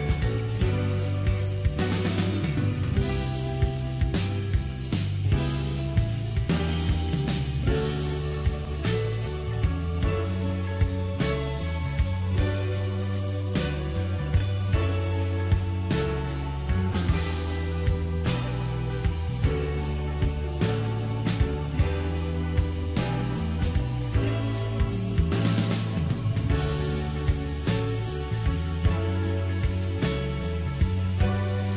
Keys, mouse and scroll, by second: 1.0 Tab, 3.8 click, 5.1-8.1 drag, 8.1-14.4 right drag, 14.4 Tab, 15.2-18.2 middle drag, 18.6-19.6 scroll up 1, 19.6-20.6 middle drag, 20.6-21.1 scroll down 1, 21.1-22.3 shift+middle drag, 22.3 click, 23.0-24.0 scroll up 2, 24.9 alt+shift+click, 25.3 scroll down 1, 25.4-27.1 middle drag, 27.3 KP_7, 28.4 shift+z, 28.8-29.2 scroll up 3, 29.2-30.9 shift+middle drag, 31.2 click.